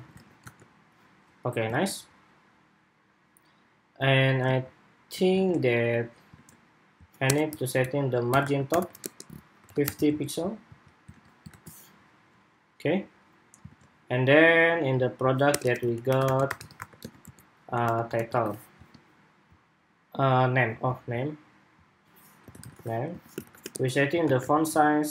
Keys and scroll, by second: 0.0 super+Tab, 0.2 super+r, 1.4 super+Tab, 5.0 super+Tab, 6.1 super+Tab, 10.6 super+s, 11.0 super+Tab, 11.2 super+r, 13.4 super+Tab.